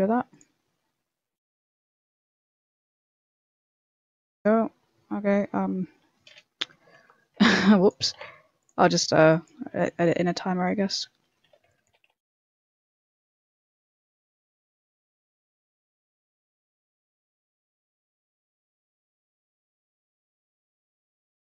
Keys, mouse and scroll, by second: 5.5 middle click, 6.8 KP_1, 6.9 KP_1, 7.6 b, 7.9 g, 8.7 shift+middle click, 9.2 b, 9.7 e, 10.2 shift+middle click, 10.9 shift+middle click, 11.4 a, 11.6 b, 11.8 g, 13.0 a, 13.0 b, 13.4 shift+middle click, 13.8 e, 14.7 shift+middle click, 15.0 a, 15.3 b, 15.6 g, 16.8-19.2 typing, 17.5 shift+middle click, 18.5 shift+middle click, 20.8-21.4 typing, 21.1 shift+middle click.